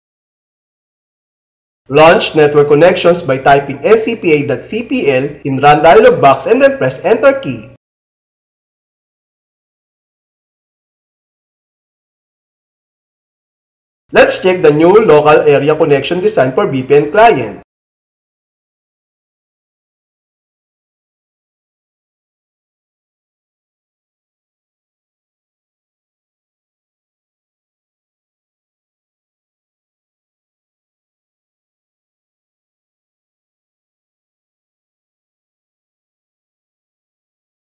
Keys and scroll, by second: 8.2 super+r, 17.6 super+Left, 29.7 super+6, 36.7 super+7.